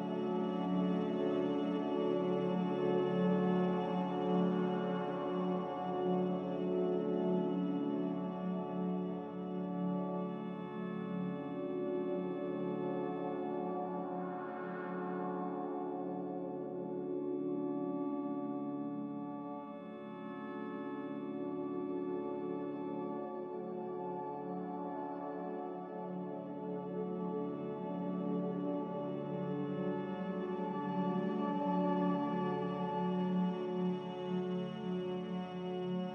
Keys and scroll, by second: 0.0-0.6 typing, 14.8 5, 15.1 Return, 18.7 Return, 20.3 ctrl+z, 21.0 F9, 23.0 5, 23.2 Return.